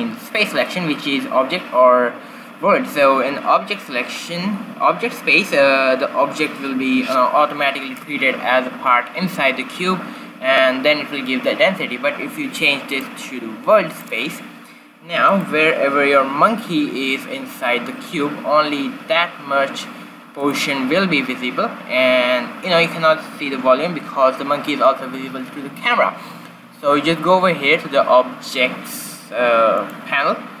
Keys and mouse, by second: 12.9-14.6 drag, 14.6 middle click, 15.3-17.3 drag, 16.7 g, 29.8-30.6 drag.